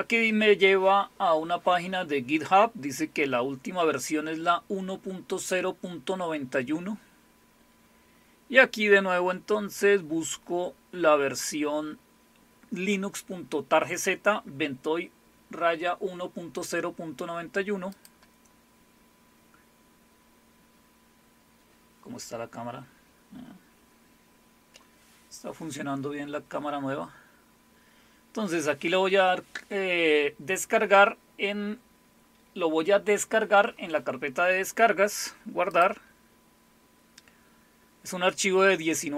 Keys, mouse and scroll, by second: 2.6 scroll down 2, 5.7-6.9 scroll down 6, 8.0 scroll down 2, 8.9 scroll down 2, 17.9 click, 35.7 click.